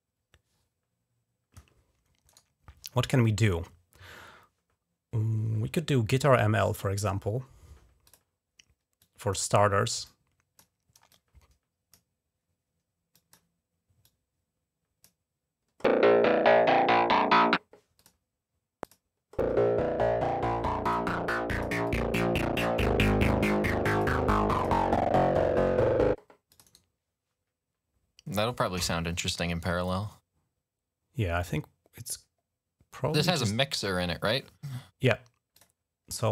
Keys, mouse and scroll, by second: 2.1 right click, 7.9 click, 8.8 click, 9.9 click, 10.9 click, 13.0 click, 13.9-15.0 drag, 17.8 click, 18.7 click, 18.8 right click, 20.7 click, 20.8 right click, 21.4 click, 21.5 right click, 21.7-23.9 drag, 24.4 click, 24.6-25.7 drag, 26.3 click, 35.4 click, 36.2 click.